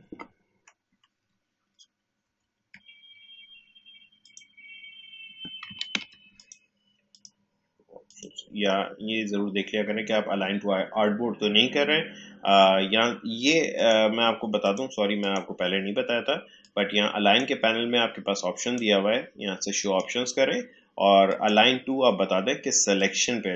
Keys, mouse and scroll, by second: 2.2 shift+F7, 4.2 click, 5.8 ctrl+z, 6.3 click, 13.7-18.5 drag.